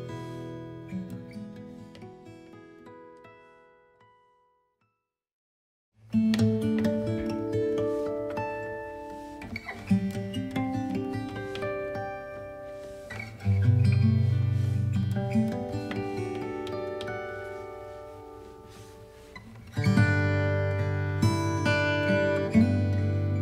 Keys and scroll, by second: 3.4 KP_8, 3.6 Return, 12.8 b, 13.5 alt+x.